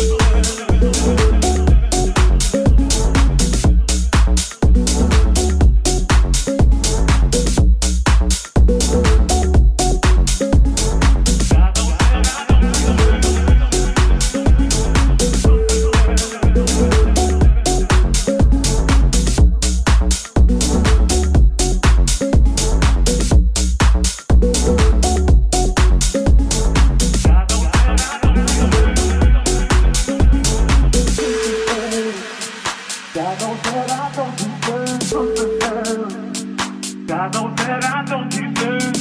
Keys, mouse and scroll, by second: 0.0 right click, 0.2 shift+right click, 0.6 shift+right click, 1.1 shift+right click, 1.7 shift+middle click, 1.7 shift+right click, 2.4 shift+middle click, 2.4 shift+right click, 2.7 shift+middle click, 2.7 shift+right click, 2.9 shift+middle click, 2.9 shift+right click, 3.2 shift+middle click, 3.2 shift+right click, 4.9-6.7 shift+drag, 7.6 shift+click, 7.6 middle click, 7.6 right click, 7.9 shift+middle click, 7.9 shift+right click, 8.0 middle click, 8.0 right click, 8.3 shift+click, 9.6 click, 11.8 shift+click, 16.4-18.2 drag, 17.5 s, 18.0 shift+right click, 18.5 shift+click, 18.9-20.3 drag, 22.0 click, 24.3 shift+click, 24.3 shift+middle click, 24.3 shift+right click, 25.6 shift+click, 25.6 shift+middle click, 25.6 shift+right click, 25.8 shift+click, 25.8 shift+middle click, 26.1-27.3 shift+drag, 30.2-32.3 shift+drag, 34.8-37.0 shift+drag, 37.1-39.0 shift+drag.